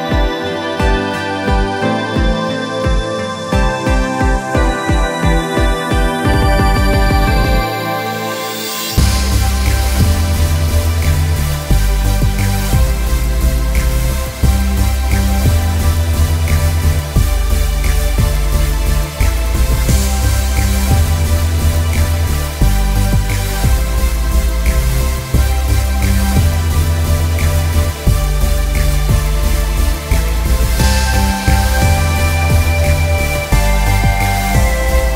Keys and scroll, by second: 22.2 Delete.